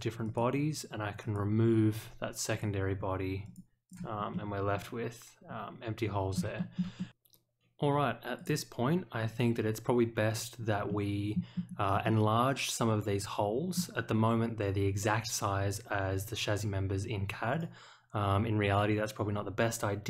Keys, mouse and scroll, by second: 0.2 click, 1.2 click, 2.5 click, 3.4 click, 3.8 click, 4.3-6.3 middle drag, 6.5 shift+middle click, 6.9 middle click, 8.3 click, 10.8 middle click, 11.5-11.9 scroll up 1, 12.0-13.7 middle drag, 14.9-15.3 scroll down 1, 17.5 click.